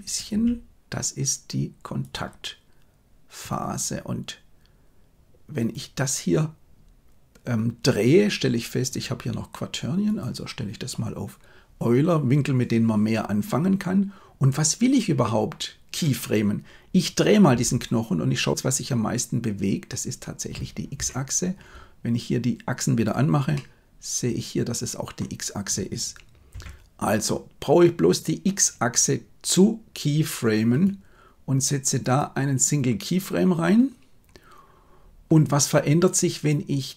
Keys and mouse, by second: 0.2 g, 3.3 right click, 8.8-10.2 drag, 17.4 r, 22.9 click, 23.5-25.2 middle drag, 26.5 KP_1, 30.7-32.2 right drag.